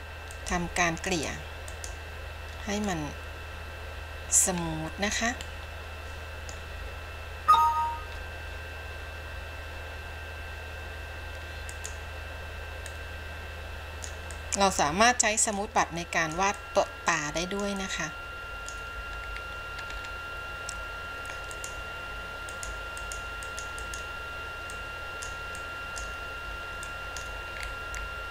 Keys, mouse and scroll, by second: 1.3 click, 1.9 click, 3.0-4.6 middle drag, 4.8-5.7 scroll up 5, 5.7-6.8 middle drag, 7.0-8.5 scroll down 2, 11.8 click, 13.0-14.5 drag, 16.0 click, 16.8-17.8 drag, 18.0-19.0 drag, 19.4-20.0 scroll down 2, 20.0-21.6 scroll up 3, 21.6 click, 22.7 click, 23.2 click, 23.7 click, 24.1 click, 24.9 click, 25.8 click, 27.0 click, 27.8-28.3 scroll down 4.